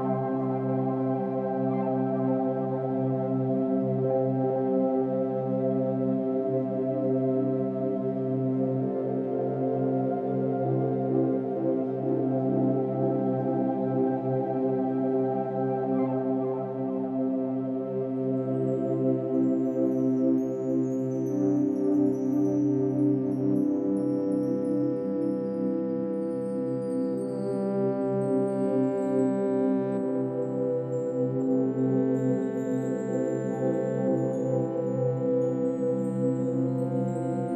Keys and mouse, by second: 2.8 alt+a, 5.2 -, 7.4-8.1 alt+drag, 8.7 click, 9.0-10.3 drag, 10.3 ctrl+a, 10.8-11.4 typing, 11.7 Return, 12.8-13.6 drag, 14.5 click, 15.2-15.7 typing, 15.6 click, 17.3-22.0 typing, 20.9-21.9 drag, 23.5-24.5 drag, 24.6 typing, 25.5-27.3 drag, 27.1-27.8 typing, 29.1 click, 30.3-30.7 typing, 33.1 shift+click, 34.1 alt+click, 35.1 click, 36.2 ctrl+alt+click, 36.8-37.5 typing.